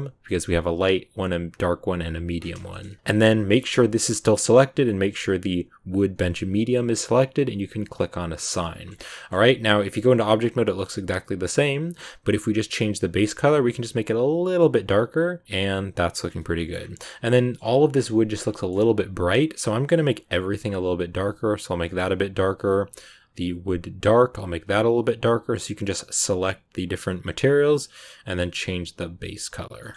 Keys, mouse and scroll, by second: 2.3 scroll down 2, 2.5 scroll up 1, 2.6 shift+middle click, 3.5 g, 7.9 click, 8.4 middle click, 9.3 Tab, 10.0-11.5 middle drag, 11.5 click, 16.2 scroll down 1, 16.2 scroll up 1, 16.3 middle click, 16.7-17.0 scroll down 6, 17.0 middle click, 17.5-17.9 scroll up 2, 17.9 scroll down 1, 18.0 middle click, 18.3 scroll up 2, 18.5 middle click, 19.2 click, 21.8 middle click, 21.9 scroll up 1, 22.5 click, 23.1 click, 27.8 click, 29.7 middle click, 29.8 scroll down 1, 29.9 scroll up 1.